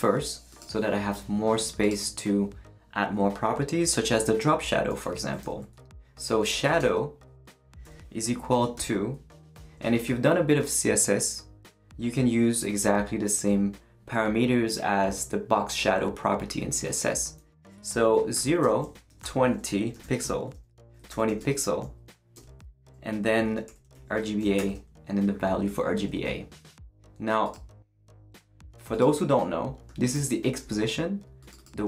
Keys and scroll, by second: 5.4 Return, 6.1-9.5 typing, 18.3-24.6 typing.